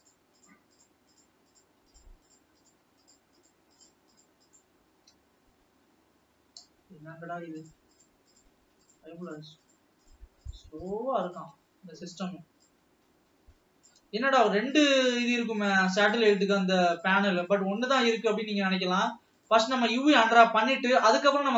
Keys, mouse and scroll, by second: 4.6-5.6 shift+click, 6.3 scroll down 2, 6.8-7.1 scroll up 2, 7.9 shift+click, 9.3 shift+click, 9.6 shift+click, 11.1-11.6 shift+drag, 11.8 scroll down 2, 12.6-14.8 drag, 15.1 shift+click, 15.6 shift+click, 16.4-16.8 shift+drag, 17.0 shift+click, 17.3 shift+click, 18.1 shift+click, 18.5 shift+click, 19.8 shift+click, 20.3-20.7 shift+drag, 20.9 shift+click, 21.2 shift+click.